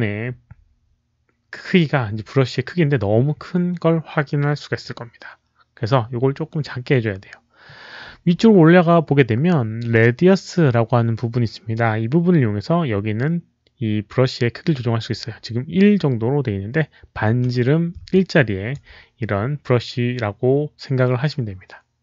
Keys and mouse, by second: 0.4 alt+click, 3.4 alt+click, 4.3 alt+click, 18.0 alt+click, 20.7 alt+click.